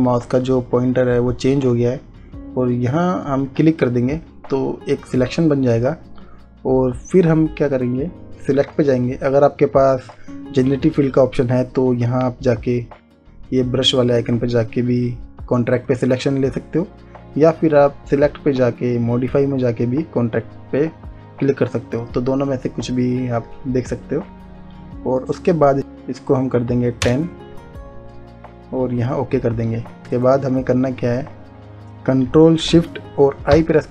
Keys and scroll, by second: 25.8 1, 27.3 0, 33.8 ctrl+shift+i.